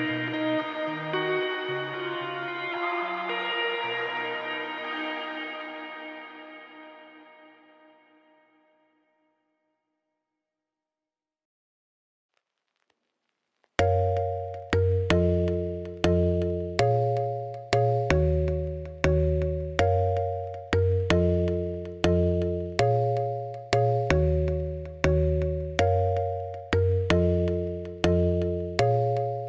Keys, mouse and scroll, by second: 0.1 click, 1.3 x, 2.2 middle click, 2.5-2.8 scroll down 9, 2.8 shift+middle click, 3.4 click, 3.8 KP_Decimal, 4.2 scroll up 1, 4.4 scroll down 2, 4.6 middle click, 5.1 click, 7.2 click, 7.4 m, 8.0 click, 8.2 m, 8.7 click, 9.0 m, 9.4 KP_1, 9.8 shift+middle click, 10.0 scroll down 2, 10.6 click, 11.9 scroll down 1, 12.0 scroll up 4, 12.4 scroll down 1, 12.7 scroll up 1, 12.9 click, 15.9 shift+middle click, 16.5-16.8 scroll up 2, 16.8 scroll down 3, 17.3-18.6 shift+middle drag, 18.6 click, 19.3 m, 19.6 click, 20.1 m, 20.6 click, 20.9 m, 21.2 click, 22.0 m, 22.5 click, 23.1 m, 23.5 click, 24.0 m, 24.4 click, 24.9 m, 25.5-27.1 middle drag, 27.1-29.4 typing, 27.2 click, 27.5 click, 28.5 shift+middle click, 29.0 click.